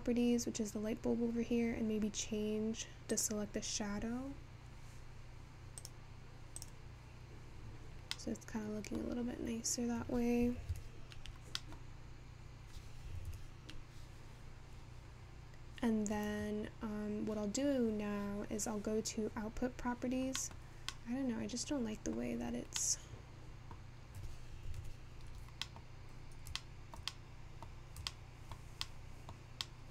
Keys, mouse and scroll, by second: 4.5 click, 25.3 alt+KP_0.